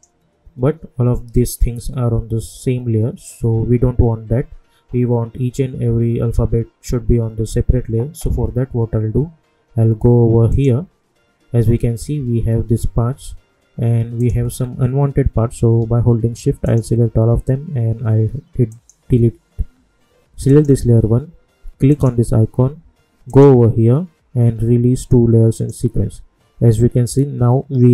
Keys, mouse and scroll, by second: 10.5 click, 13.1-13.6 scroll down 1, 14.2 click, 14.5 scroll down 1, 16.6 shift+click, 18.7 click, 25.5 click.